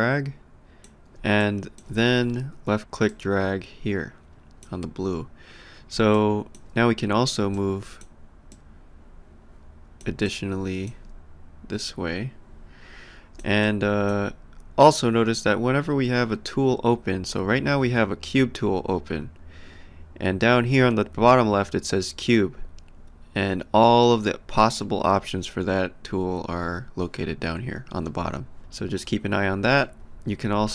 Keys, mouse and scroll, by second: 1.4 alt+click, 3.1 click, 6.1 alt+click, 7.5 click, 10.0 alt+click, 11.8 click, 13.3 alt+click, 14.9 click.